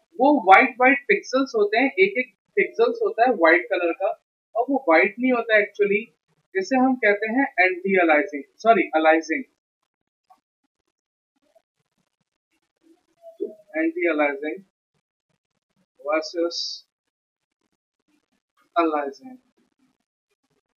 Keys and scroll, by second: 1.1 ctrl+z, 12.2-14.1 typing, 15.3 Down, 16.0-18.5 typing, 18.2 ctrl+shift+Left, 18.4 Delete, 20.3 Down, 20.5 Down.